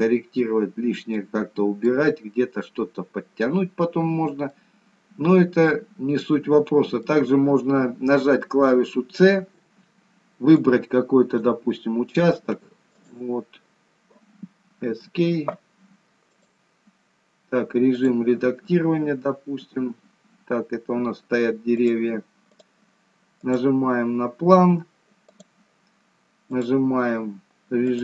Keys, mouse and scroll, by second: 0.3 scroll down 1, 0.5 middle click, 3.3-3.7 scroll up 4, 4.0 scroll down 1, 4.7 scroll up 1, 4.9 middle click, 16.4 click, 20.1 scroll down 2, 20.7 scroll up 2, 22.0 click, 23.5 click.